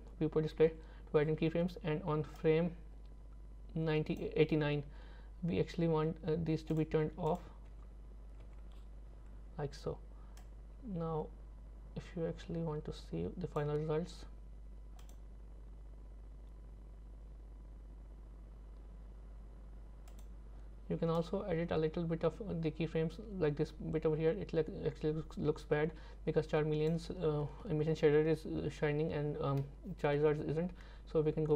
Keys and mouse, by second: 0.7 i, 2.4-4.2 drag, 6.7 click, 10.4-13.6 drag, 15.1 click, 20.1 click, 21.2-26.9 drag.